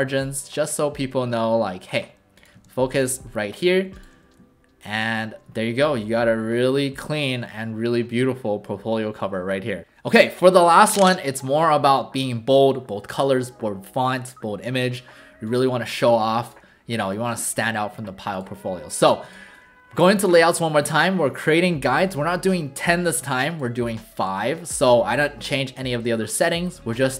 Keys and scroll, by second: 2.5 v, 4.1 w.